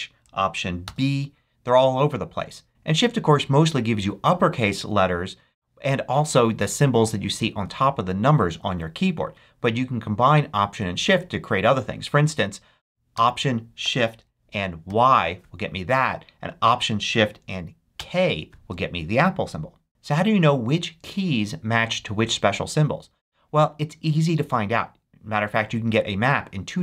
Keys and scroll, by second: 0.8 alt+b, 14.8 alt+shift+y, 17.9 alt+shift+k.